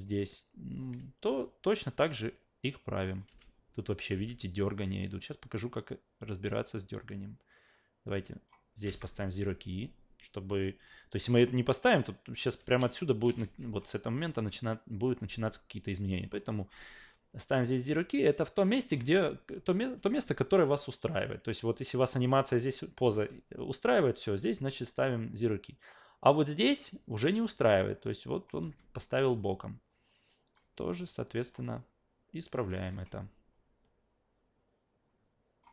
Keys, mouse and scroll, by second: 1.4-3.2 drag, 3.3 alt+v, 4.1 alt+v, 4.6-8.5 drag, 8.8 s, 11.9-12.4 drag, 12.5 w, 12.9-13.2 shift+middle drag, 13.4 ctrl+z, 24.9-28.5 drag, 28.6 e, 29.4-30.5 drag, 30.7-31.5 alt+drag, 31.7 alt+click, 32.8 s, 33.5-35.6 drag.